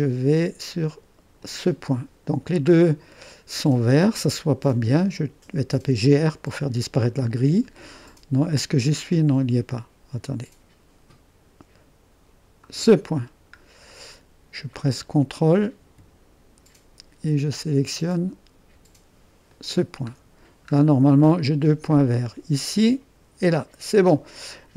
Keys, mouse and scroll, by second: 1.4-2.4 drag, 3.3-3.7 scroll down 1, 3.7-5.7 drag, 5.4-6.4 typing, 6.6-8.0 scroll up 1, 8.0 click, 8.8 middle click, 12.6 click, 13.2-13.9 scroll down 1, 13.9-14.3 scroll up 1, 19.5 click, 20.2-21.2 scroll down 1, 21.2-22.6 drag.